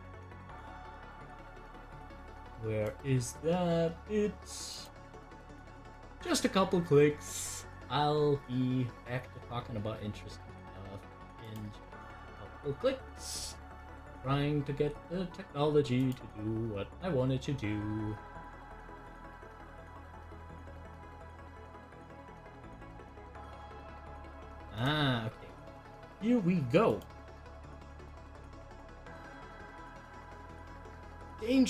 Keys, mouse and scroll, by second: 0.4 click, 11.3 click, 15.9 click, 19.8-31.6 drag.